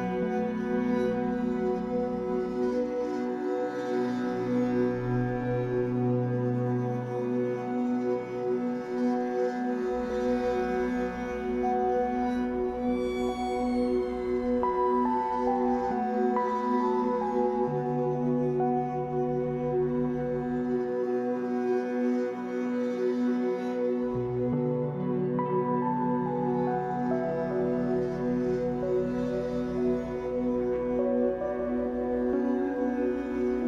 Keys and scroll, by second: 15.6 space, 27.8 space.